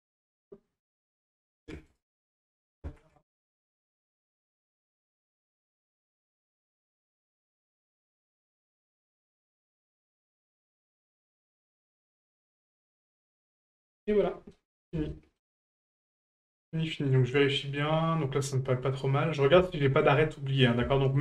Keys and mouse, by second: 1.0-2.1 ctrl+drag, 4.0 click, 4.4 ctrl+click, 6.6 right click, 8.6-9.9 ctrl+drag, 11.0 right click, 14.2-14.5 middle drag, 15.1 shift+middle drag, 15.5-19.3 middle drag, 19.7-20.0 shift+middle drag, 20.4 middle drag, 20.9 shift+middle drag.